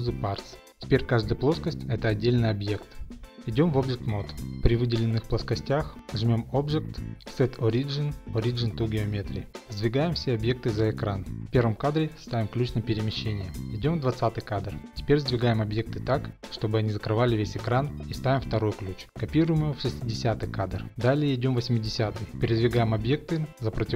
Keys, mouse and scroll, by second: 0.5 click, 3.6 Tab, 6.2 click, 9.3 click, 10.0-10.7 scroll, 10.7 scroll, 12.9 click, 15.3 click, 16.9 g, 17.7 click, 18.2 i, 19.0 click, 19.6 click, 19.9 d, 20.8 click, 22.5 click, 23.5 shift+middle click.